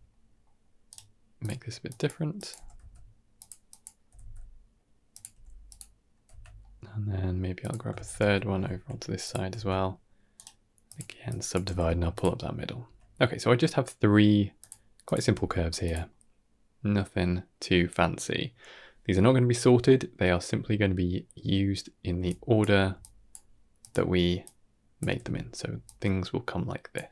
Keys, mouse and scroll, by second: 0.0-0.3 middle drag, 0.8-1.7 right drag, 1.7 click, 2.2 click, 2.4 g, 3.5 click, 3.9 r, 5.2 g, 6.2 Tab, 6.5-7.2 middle drag, 7.5 click, 7.8 shift+d, 9.4 Tab, 10.2 right click, 11.2 click, 11.5 g, 12.2-12.6 middle drag, 12.7 Tab, 13.1 middle click, 14.5 click, 14.9 click, 15.1 g, 16.0-18.5 middle drag, 19.7-22.0 middle drag, 22.0-25.5 typing, 22.1 click, 22.9 click, 23.7 click, 24.3 click, 25.7 click, 26.8 d, 26.9 d, 27.0 d.